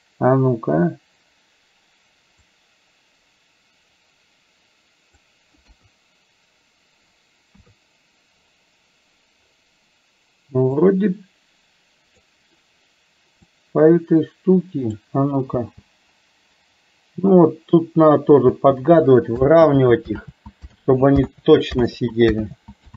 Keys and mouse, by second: 2.5 click, 3.3-5.3 drag, 5.7 KP_1, 7.6 KP_3, 11.0-12.2 drag, 13.5 click, 14.2 click, 15.6 space, 18.6 space, 19.7 ctrl+z, 20.2 ctrl+z, 20.8 ctrl+z, 21.4 ctrl+z, 22.0 ctrl+z, 22.5 ctrl+z.